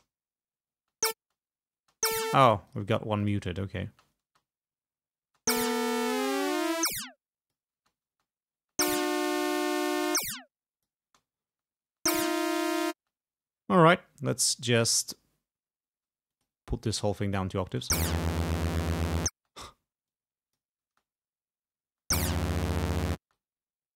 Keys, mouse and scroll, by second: 0.0 space, 0.9 space, 2.5 space, 2.8 click, 3.3 click, 3.9 space, 5.3 space, 6.2-7.8 drag, 7.8 space, 10.0-11.2 drag, 11.2 space, 13.1 space, 16.4 click, 17.7 space, 19.4 space, 20.1 click, 20.9 space, 22.0 space, 23.3 space, 23.4-23.9 drag.